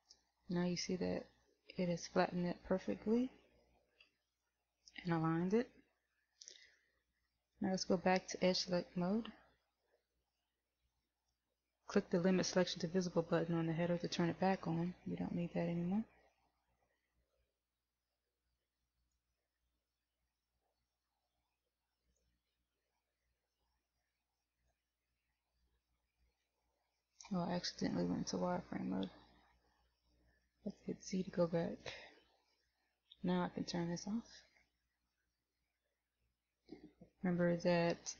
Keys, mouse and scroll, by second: 0.6 middle click, 4.4 KP_1, 10.3 click, 19.1 click, 22.2 click, 24.7 middle click, 26.8 middle click, 29.3 z, 31.8 KP_1, 33.8 click.